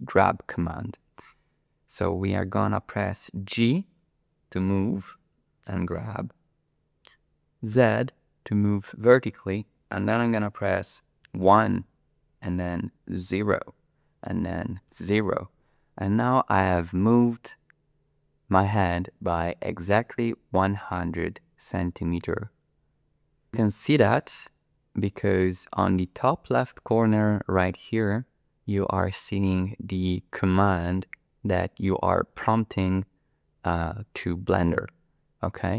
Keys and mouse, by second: 3.7 g, 7.8 z, 11.3 KP_1, 13.3 KP_0, 14.9 KP_0.